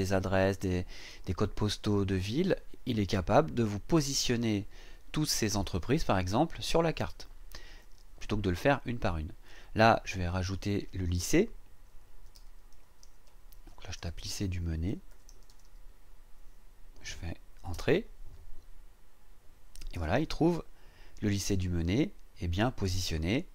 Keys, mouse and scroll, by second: 10.4 click, 11.6-16.0 typing, 17.7 Return.